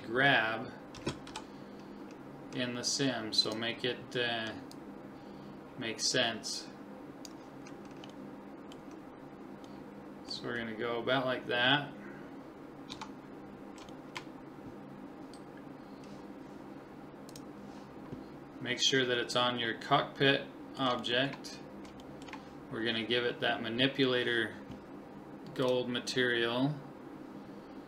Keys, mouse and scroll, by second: 1.0 s, 4.7 click, 6.6 click, 7.8-11.5 middle drag, 12.9 Tab, 13.4-15.9 middle drag, 17.3 click, 19.2-24.0 middle drag, 25.6 click.